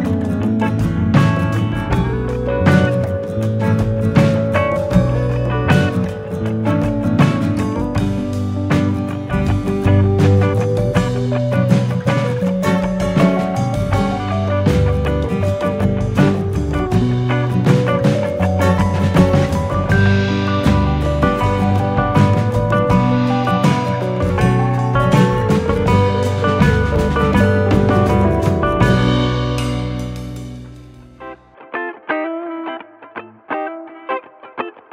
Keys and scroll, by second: 13.1 ctrl+=, 22.9-24.7 scroll, 24.7-26.3 scroll, 27.2-28.0 scroll, 33.5 u.